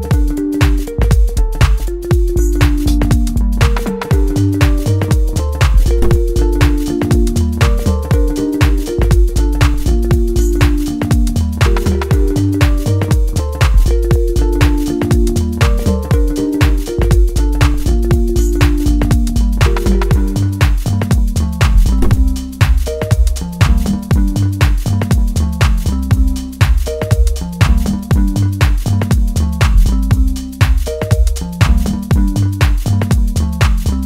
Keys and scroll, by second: 4.6 F3, 12.0 shift+n, 12.2 e, 12.9 Return, 13.4 shift+s, 13.6 e, 13.7 a, 13.9 s, 14.9-17.1 typing, 16.0 Return, 17.9 ctrl+space.